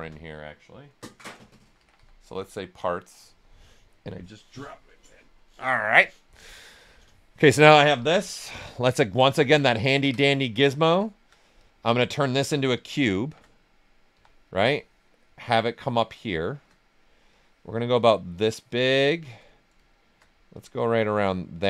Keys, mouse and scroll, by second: 0.0-2.8 typing, 8.7 right click, 9.0 alt+right click, 9.3 shift+right click, 10.8 alt+click, 11.5 click, 13.2 shift+f, 13.5 right click, 14.1 w, 14.7-16.0 drag, 16.0 right click, 17.3-18.7 drag, 18.7 right click, 19.4 right click, 20.5-21.6 drag.